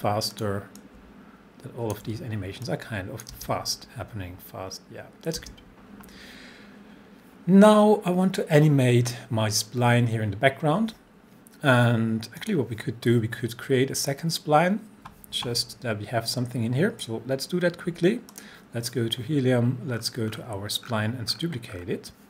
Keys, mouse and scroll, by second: 0.3-2.7 drag, 2.7-3.3 click, 3.4 space, 5.4 space, 12.4 click, 18.3 click, 20.0 scroll down 1.